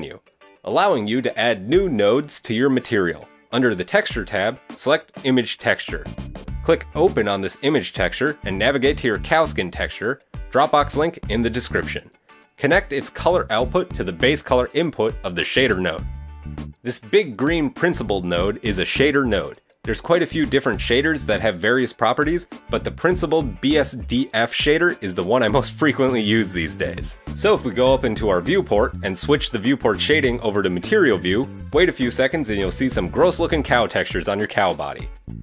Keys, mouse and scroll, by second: 7.1 click, 14.1 click, 29.2 click, 32.1 click, 32.5-33.0 scroll down 1, 33.0 scroll down 2, 33.2 shift+middle click, 33.6 middle click.